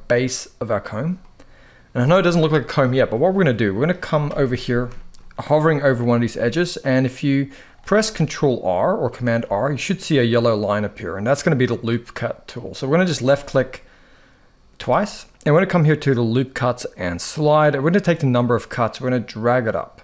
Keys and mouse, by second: 0.9 middle click, 2.8 middle click, 4.0 KP_1, 4.6 shift+middle click, 5.5 ctrl+r, 7.7 middle click, 8.9 ctrl+r, 14.5 click, 18.5 click.